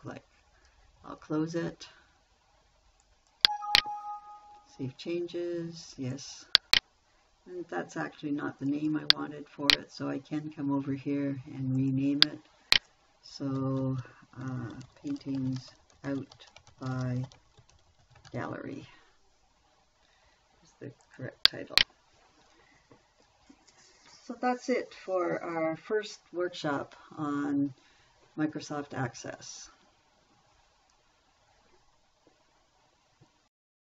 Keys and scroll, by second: 14.6-19.2 typing.